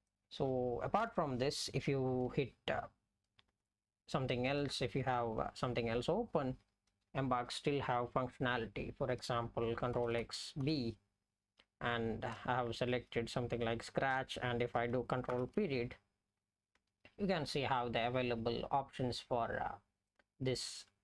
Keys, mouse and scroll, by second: 0.1 click, 1.0 BackSpace, 5.0-6.6 Up, 6.9-9.2 Up, 12.7 Down, 15.4 ctrl+..